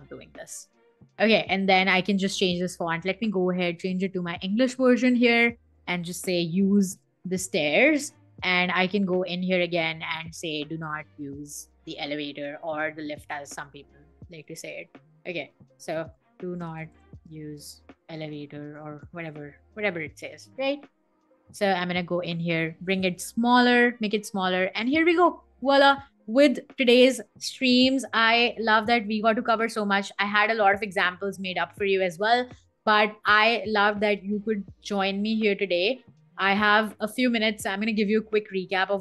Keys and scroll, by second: 0.1 shift+super+], 5.4 super+a, 5.8-7.9 typing, 15.2 super+a, 15.4-20.3 typing, 27.2 BackSpace.